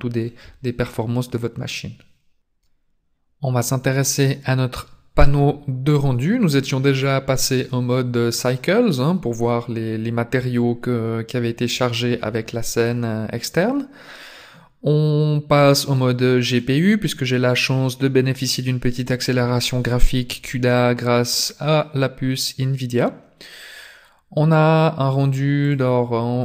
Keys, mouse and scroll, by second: 2.6 click, 5.2 click, 15.5 click, 21.3-24.6 scroll down 2, 25.6 click.